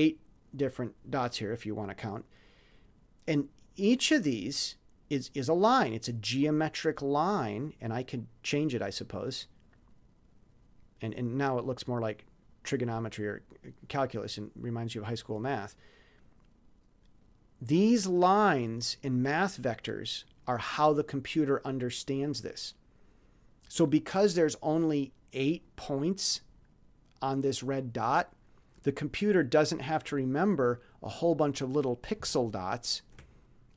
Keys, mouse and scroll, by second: 4.3 click, 6.8 click, 15.6 click, 17.2 click, 32.3-33.0 ctrl+scroll up 4.